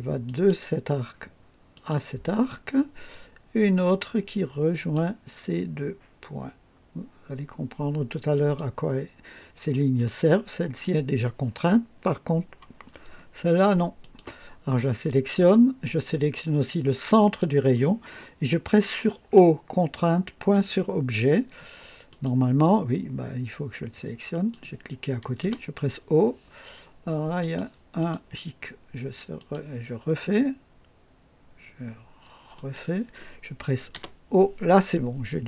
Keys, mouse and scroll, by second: 0.2 click, 1.7 click, 4.7 click, 8.3 click, 9.7 right click, 12.9-13.2 scroll up 2, 14.0 click, 14.5 scroll down 2, 15.0 right click, 17.2 click, 20.5 o, 22.1 click, 24.3 click, 25.4 o, 27.4 click, 28.0 click, 29.4 click, 29.6 typing, 32.5 click, 33.9 typing.